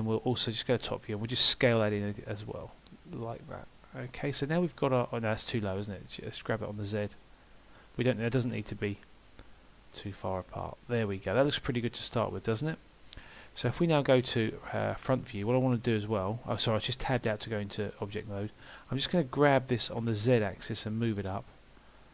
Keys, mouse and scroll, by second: 0.7 KP_7, 1.7 s, 4.3 middle click, 5.8 g, 8.2 middle click, 8.6 Tab, 9.0 middle click, 15.3 KP_1.